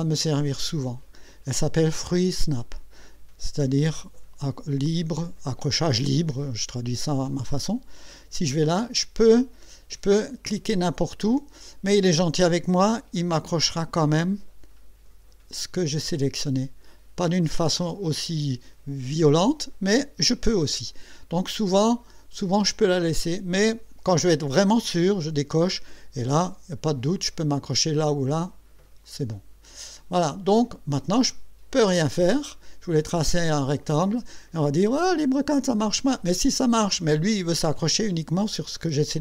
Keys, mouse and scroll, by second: 8.0 click, 24.9 click, 29.0 click.